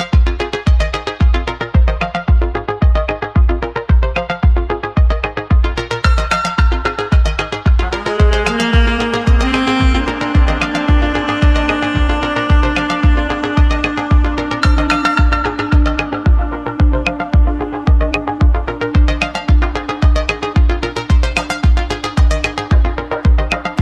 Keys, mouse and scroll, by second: 5.3 click, 6.3 Tab, 7.0-8.9 middle drag, 8.9 Tab, 9.4-11.9 middle drag, 12.0 click, 12.6 Tab, 13.2 Tab, 14.4 ctrl+r, 15.1 ctrl+r, 17.2 scroll up 1, 17.8 scroll up 4, 18.8-21.2 scroll down 1, 21.2 ctrl+r.